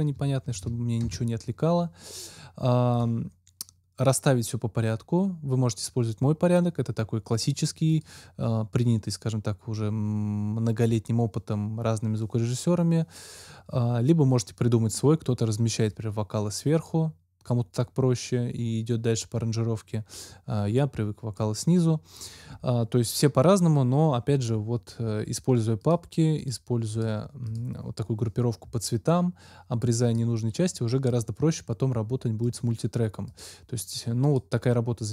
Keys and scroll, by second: 0.1 =, 0.4 BackSpace, 2.0 Return.